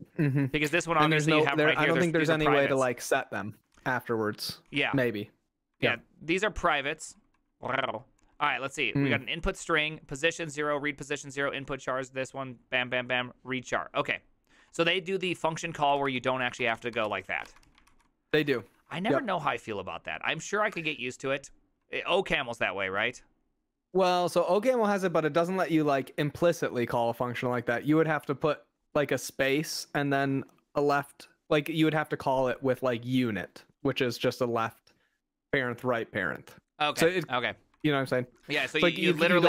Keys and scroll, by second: 0.0-1.5 typing, 3.8 ctrl+c, 4.7-5.2 typing, 5.8 ctrl+c, 6.9-9.6 typing, 14.6-20.8 typing, 22.1 j, 22.5 j, 37.8 ctrl+c, 38.1-38.5 typing, 39.1 ctrl+c.